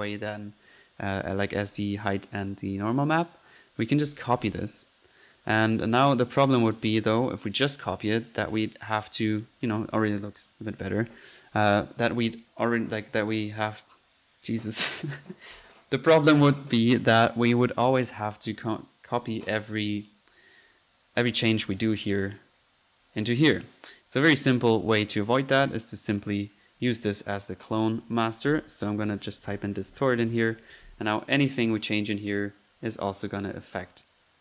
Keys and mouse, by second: 0.1 Escape, 1.8 drag, 3.8 ctrl+click, 4.0-4.8 typing, 4.7-5.1 ctrl+middle drag, 5.4-6.0 ctrl+drag, 6.2 ctrl+drag, 6.7 click, 7.4-7.7 drag, 7.9-8.9 typing, 7.9 drag, 8.2 ctrl+drag, 8.4 drag, 8.8-9.3 middle drag, 9.1 F1, 12.0 Escape, 12.8 middle click, 13.2-13.8 drag, 16.0-16.8 typing, 19.2 drag, 23.1-23.7 drag, 24.5-25.2 typing, 25.2 click, 25.7-26.1 drag, 26.1 click, 27.4-28.1 typing, 27.5 click, 31.3-31.6 drag, 32.3 drag, 33.1-34.4 middle drag, 34.1-34.4 typing.